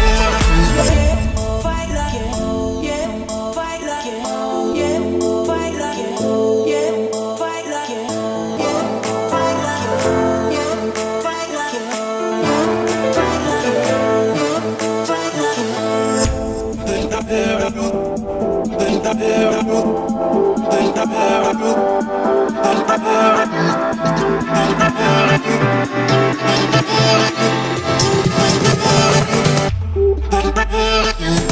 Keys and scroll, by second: 3.3 1, 11.5 1, 26.9 7.